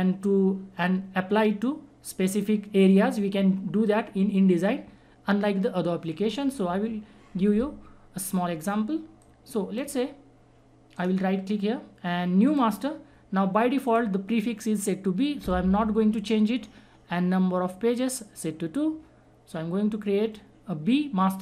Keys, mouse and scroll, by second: 9.2-10.9 drag, 10.9 right click, 12.4 click.